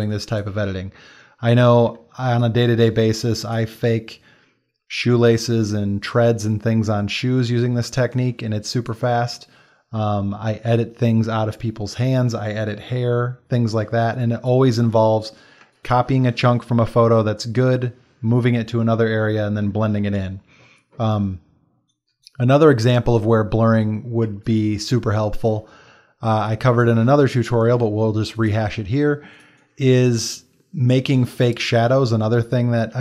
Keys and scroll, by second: 1.9 ctrl+space, 8.0 space, 13.1 space, 15.7 space.